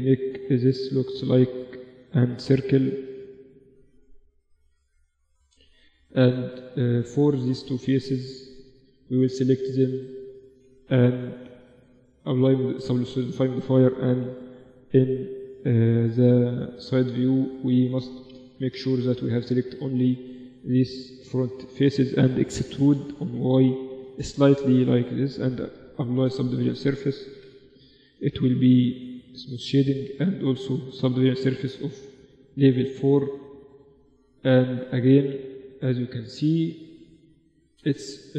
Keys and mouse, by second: 0.1-2.5 right drag, 2.0 g, 3.3-9.1 right drag, 3.5 g, 4.5 g, 5.9 g, 7.4 g, 9.1-10.7 middle drag, 10.1 z, 10.7 click, 10.8 middle click, 10.9 click, 11.0 right click, 11.1 click, 11.3 Tab, 12.5 Tab, 13.7 KP_7, 14.4 z, 16.1 click, 16.4 a, 16.9 a, 17.6 KP_1, 19.1 z, 19.7-20.8 middle drag, 20.9 KP_7, 22.3 e, 24.3 Tab, 25.2 ctrl+3, 26.7 KP_1, 27.3 middle click, 28.6-29.6 drag, 28.8 t, 29.6 middle click, 30.5-31.6 drag, 30.7 ctrl+4, 31.9 click, 33.8 click, 34.6-37.1 middle drag, 37.0-38.3 drag.